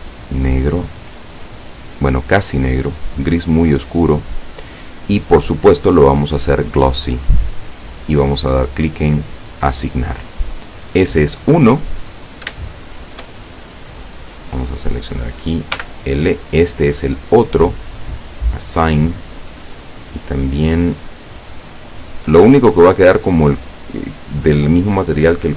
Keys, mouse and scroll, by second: 6.0 click, 7.4 click, 9.6 click, 12.1 scroll down 1, 12.7 shift+middle click, 14.2 right click, 15.8 l, 18.1 click.